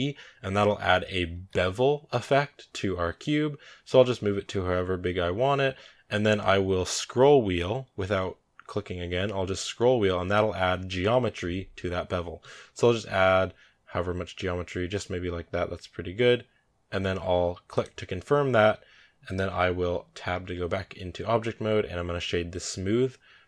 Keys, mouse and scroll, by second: 1.1 ctrl+b, 20.3 Tab.